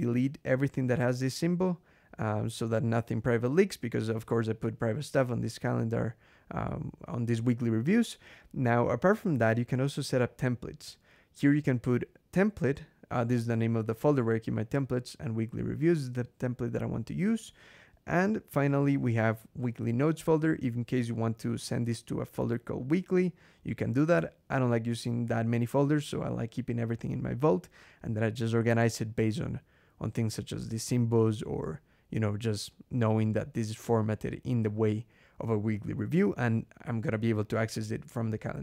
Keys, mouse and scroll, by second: 0.5 click, 2.0 click, 2.6 click, 3.1 scroll down 2, 5.0 click, 5.9 scroll down 2, 9.6 scroll down 2, 10.4 click, 12.2 click, 13.3-14.4 drag, 15.0-15.9 drag, 17.3 click, 20.0 click, 20.8-22.8 typing, 23.4-23.9 drag, 23.9 BackSpace, 24.5 click, 30.0-30.7 drag, 31.2 click, 31.9 click, 34.1-35.1 drag, 35.9 scroll up 1, 37.2-37.5 scroll up 2.